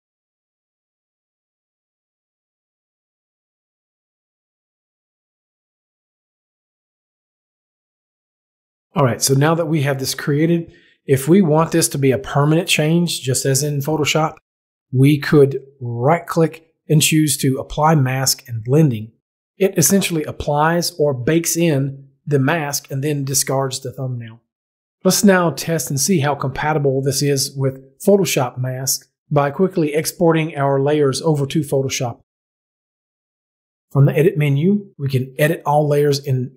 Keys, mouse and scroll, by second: 0.4 click, 1.0 click, 4.4 click, 15.7 right click, 33.6 click.